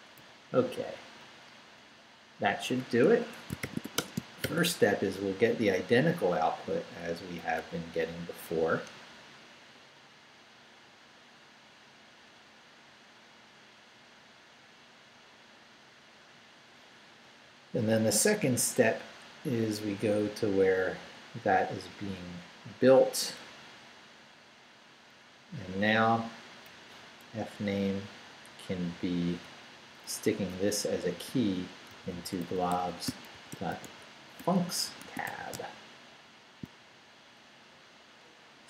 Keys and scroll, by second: 0.2 Down, 1.4 Up, 3.1 Escape, 3.4-4.4 typing, 5.0 shift+Up, 5.6 Up, 8.9 Return, 17.3 Return, 18.3 Down, 23.5 Down, 25.2 Up, 27.2 Left, 31.1-35.8 typing.